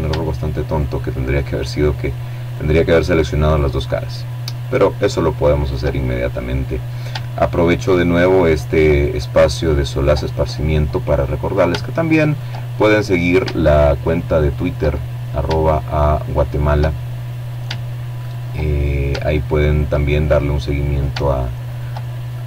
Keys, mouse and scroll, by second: 0.1 right click, 1.2 right click, 2.3 right click, 3.3 right click, 3.6 click, 5.5 shift+right click, 6.6 right click, 7.6 right click, 7.9 click, 7.9 middle click, 10.0 shift+right click, 10.4 shift+middle click, 12.2 shift+right click, 13.4-14.9 shift+middle drag, 15.9 shift+right click, 17.3 shift+right click, 17.7 shift+click, 19.4 shift+right click, 20.0-21.1 shift+middle drag, 21.2 shift+right click, 21.9 shift+middle click.